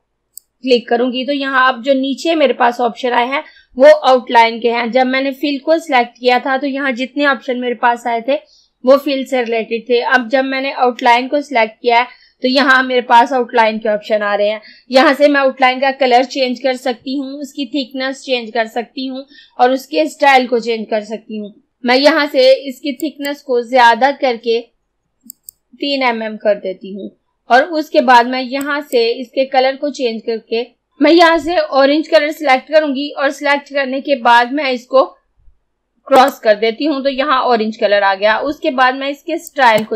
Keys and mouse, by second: 23.0 click, 25.4 click, 28.6-30.9 drag, 36.2 click, 39.5 click.